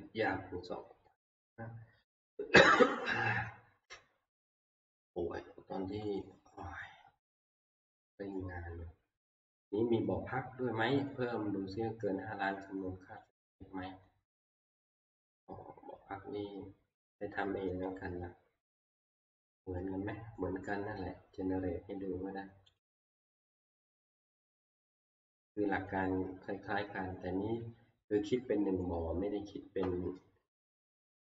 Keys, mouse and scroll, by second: 6.2 click, 8.4 middle click, 9.2 scroll, 9.5 middle click, 9.8 middle click, 9.9 middle click, 11.2 click, 13.3 scroll, 13.3 click, 15.1 click, 17.0-17.5 scroll, 17.9 click, 18.6 scroll, 20.3 scroll, 22.2 middle click, 22.8 click, 24.5 click, 26.0 click.